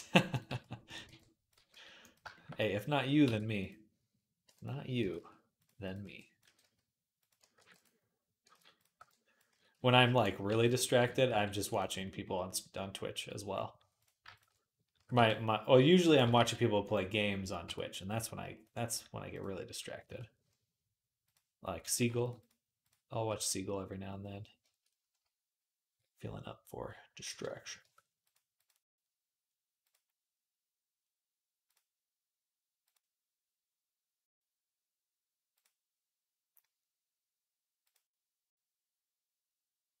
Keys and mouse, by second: 0.3 z, 0.7 click, 0.9 b, 1.4 g, 3.1 e, 3.3-4.4 middle drag, 4.2 m, 4.8 g, 5.8 b, 6.2 g, 7.4 ctrl+r, 8.3 ctrl+z, 8.8 b, 9.3 s, 10.3 ctrl+r, 10.8 s, 12.1 middle click, 12.4-18.6 middle drag, 13.0 z, 14.8 s, 16.0 g, 17.4 Tab, 18.6-21.9 right drag, 19.9 Tab, 21.1 click, 21.1 middle click, 21.9 alt+shift+click, 22.2-24.4 right drag, 24.4 shift+click, 24.6-40.0 shift+right drag, 27.6 Tab, 28.1 click, 28.1 middle click, 28.5-40.0 drag, 28.5-40.0 middle drag.